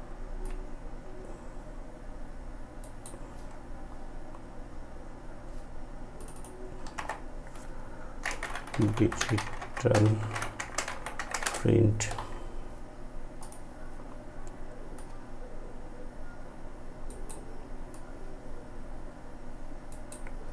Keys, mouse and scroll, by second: 1.7 ctrl+right click, 5.2 click, 5.9 ctrl+a, 8.9 space, 9.6 p, 12.4-16.1 drag, 16.1 ctrl+right click, 16.9-18.9 ctrl+drag, 18.9 ctrl+right click, 20.0 click.